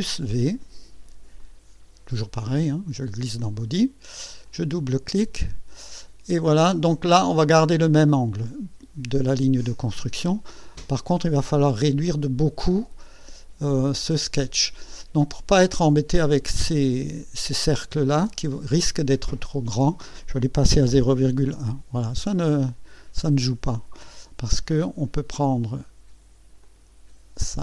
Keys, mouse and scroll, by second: 0.1 ctrl+v, 1.4-3.3 drag, 4.3 click, 5.3 scroll up 2, 5.8 right click, 10.5 scroll up 1, 11.1-13.2 right drag, 14.4-14.8 scroll up 1, 14.9 right click, 15.8 scroll up 1, 19.1 click, 20.7 KP_0, 21.0 KP_Decimal, 21.2 KP_1, 21.5 KP_Enter, 22.7-23.1 scroll down 1, 23.5-24.2 right drag, 26.6-27.6 drag.